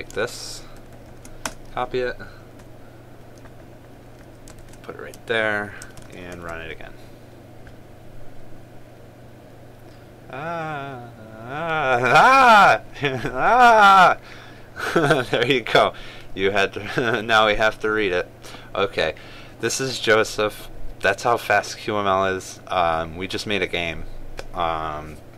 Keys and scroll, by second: 1.5 ctrl+c, 5.3 ctrl+v, 6.5 ctrl+s, 7.0 ctrl+r.